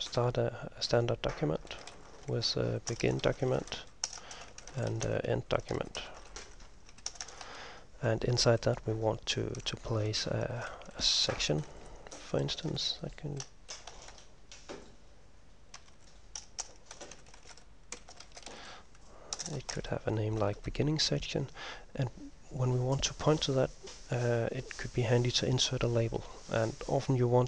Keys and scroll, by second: 0.0-8.0 typing, 10.6-14.7 typing, 15.9-21.2 typing.